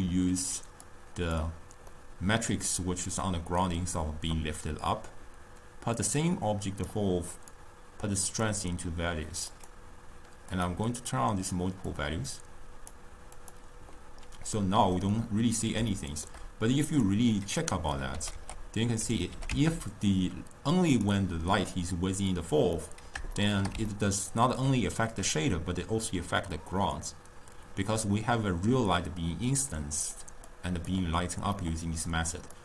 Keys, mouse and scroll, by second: 0.9 click, 2.0-5.1 middle drag, 6.1 drag, 7.7 drag, 9.6 click, 11.0 click, 12.0 click, 13.5 click, 14.5 scroll up 1, 14.7-16.9 middle drag, 16.9 click, 17.7-18.3 middle drag, 18.3 g, 19.4 g, 22.9-27.0 middle drag, 30.6 click, 31.7-32.6 middle drag.